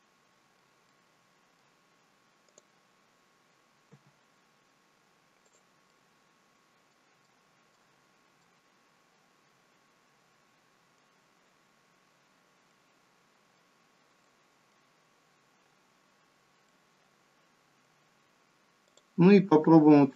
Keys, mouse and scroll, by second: 0.9 middle click, 2.5 click, 3.9 g, 5.9 middle click, 7.7 middle click, 8.0-8.4 scroll down 3, 8.4 middle click, 12.3 scroll down 3, 12.7 middle click, 14.3 middle click, 15.0-15.7 scroll up 3, 15.7-16.6 scroll up 3, 16.7 middle click, 18.9 click.